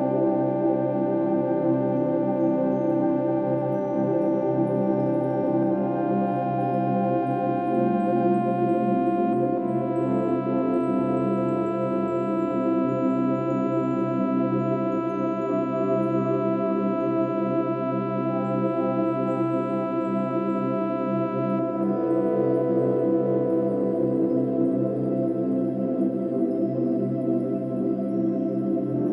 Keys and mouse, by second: 2.5-3.5 ctrl+alt+drag, 4.0 Escape, 4.9 Escape, 5.6-7.4 ctrl+alt+drag, 7.6 click, 8.4 g, 11.0 click, 13.1-13.5 ctrl+alt+drag, 13.9 ctrl+alt+click, 14.4-15.2 ctrl+alt+drag, 15.9 g, 19.0-22.6 drag.